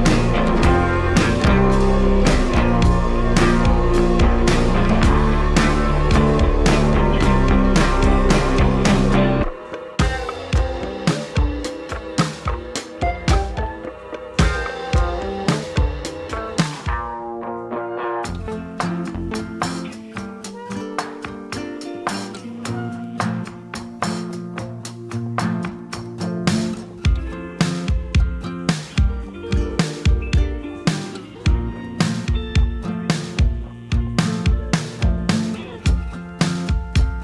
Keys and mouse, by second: 0.9 click, 1.0 KP_0, 2.3-5.1 drag, 5.1 ctrl+z, 5.1 g, 5.1 shift+d, 7.7 ctrl+Tab, 7.9 f, 8.4 click, 8.9 f, 9.3 click, 9.7 f, 10.1 click, 10.6 f, 10.8-13.4 drag, 12.1 KP_0, 14.0 click, 16.3 click, 17.1 click, 19.3 click, 20.2 ctrl+middle click, 21.2 l, 22.2 click, 22.9 Delete, 23.9 ctrl+middle click, 24.1 ctrl+z, 24.1 f, 24.3 click, 24.7 click, 25.3 click, 25.6 click, 25.9 click, 26.2 f, 26.5 click, 27.3 click, 27.6 click, 28.1 click, 28.4 shift+middle click, 28.8 f, 29.2 click, 29.8 click, 29.9 2, 30.1 click, 30.8 3, 30.8 f, 30.9 click, 31.5 f, 32.0 click, 32.6 click, 33.3 shift+click, 33.6 shift+click, 33.9 shift+click, 34.4 click, 35.0 click, 35.6 click, 35.9 ctrl+z, 36.1 click, 36.8 click.